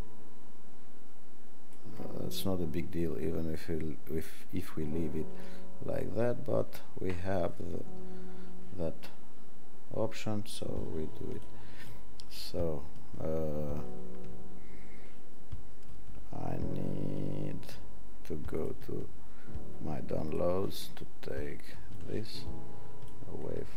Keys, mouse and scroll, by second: 2.1-9.1 alt+drag.